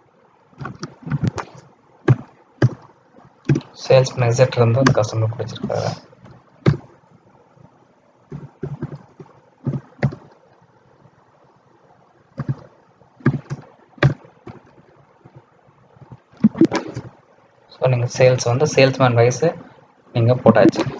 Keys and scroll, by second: 1.0 ctrl+a.